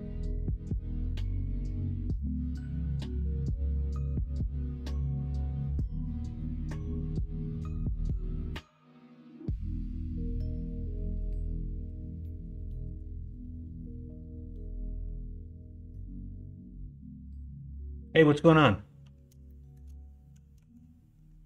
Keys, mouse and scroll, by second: 1.2 s, 3.0 g, 19.4 shift+middle click, 20.5 s.